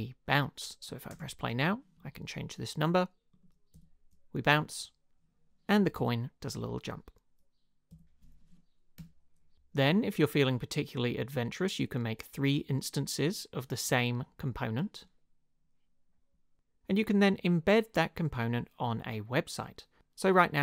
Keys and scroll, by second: 1.1 space, 3.7 Up, 6.0 Up, 7.9 Up, 9.0 Return, 9.5 space.